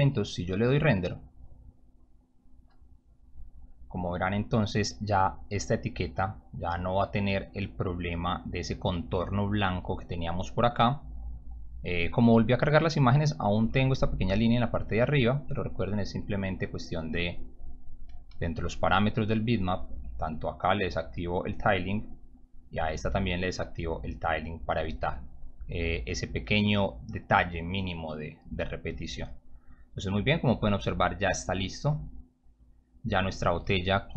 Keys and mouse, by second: 1.4 click, 15.4-16.3 drag, 16.9 click, 18.3 m, 19.4 click, 19.6 click, 21.2 click, 21.7 click, 22.3 click, 22.4 click, 23.6 click, 24.0 click, 25.8 click, 26.5 click, 29.4 click, 31.3 click, 32.2 click.